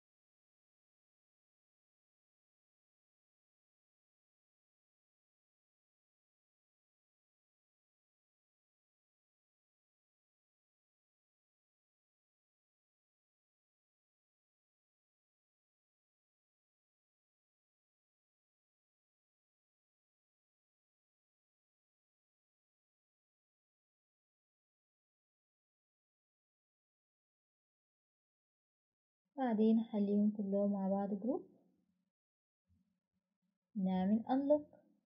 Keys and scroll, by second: 5.9 Escape, 27.2 Escape, 27.5 Escape.